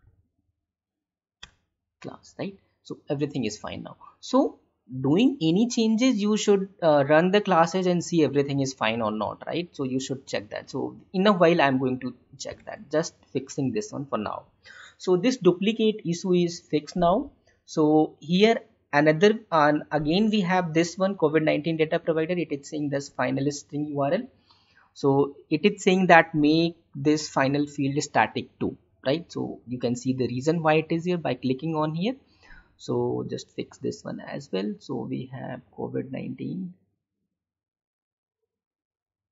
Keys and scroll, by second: 12.8 alt+Tab, 33.4 alt+Tab.